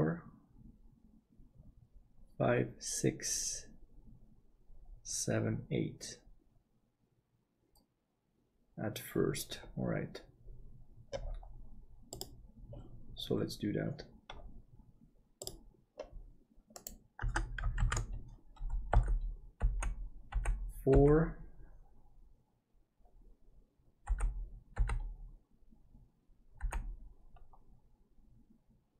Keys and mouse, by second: 13.4-15.6 drag, 17.2 Tab, 17.8 alt+a, 19.0 l, 19.6 l, 24.1 l, 24.8 l.